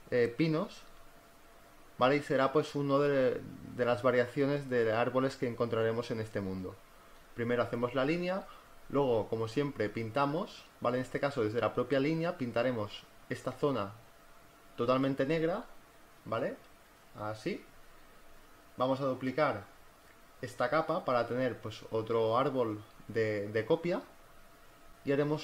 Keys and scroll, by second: 9.6-12.3 typing, 13.3-15.8 typing, 16.2 ctrl+z, 20.9 v.